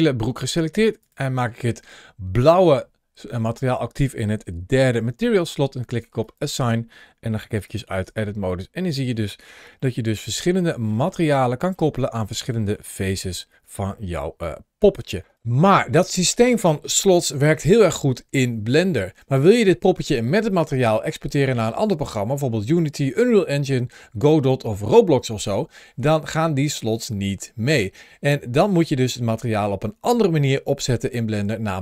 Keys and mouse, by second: 0.8 click, 6.0 click, 7.5 click, 7.9 Tab, 8.2-9.0 middle drag, 9.7-10.5 shift+middle drag, 10.7 shift+middle drag, 11.2-11.6 middle drag, 11.8 shift+middle click, 12.4 middle click, 13.1 shift+middle click, 13.8 shift+middle drag, 14.3-14.9 middle drag.